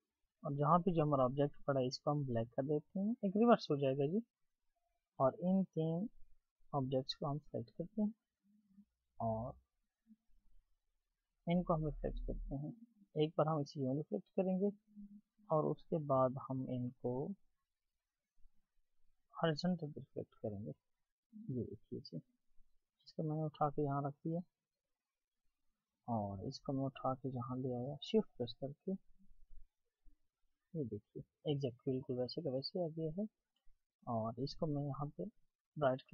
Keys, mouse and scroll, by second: 5.5 Delete, 6.8 shift+click, 8.1 shift+click, 8.8 right click, 15.0 right click, 19.1 right click, 22.9 double click, 34.7 right click.